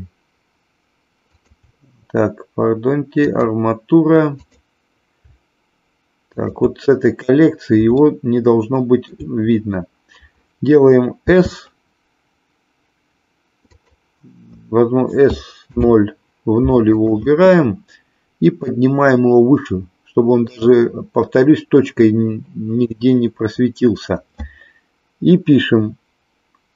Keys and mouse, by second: 1.2 shift+click, 3.3 click, 4.4 click, 7.9-9.2 shift+middle drag, 11.2 s, 13.7 click, 15.3 s, 15.7 KP_0, 16.8 click, 18.7-20.4 drag.